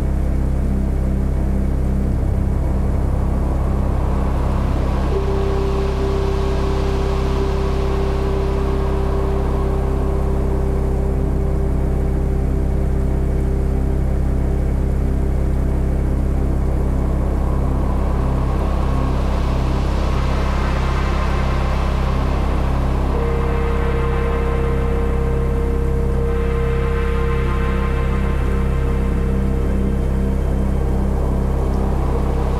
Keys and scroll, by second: 1.0 space, 2.6 [, 5.2 space, 5.8 super+space, 6.0 alt+super+z, 6.8 alt+super+x, 7.4 alt+x, 8.8 0, 10.9 space, 13.6 space, 17.6-18.6 typing, 19.6-21.1 typing, 22.2 space, 23.6 space, 24.5 space, 25.7 space, 26.7-32.5 typing.